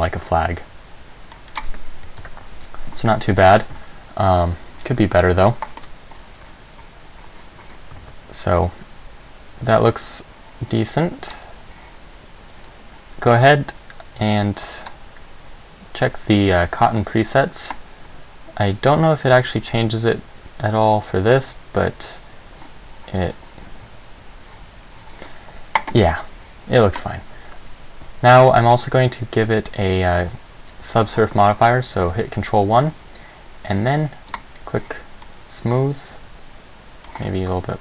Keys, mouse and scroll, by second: 1.7 right click, 2.4 KP_0, 3.9 Escape, 8.2 alt+a, 11.4 click, 12.9 click, 32.2 ctrl+1, 34.5 click, 35.4 middle click.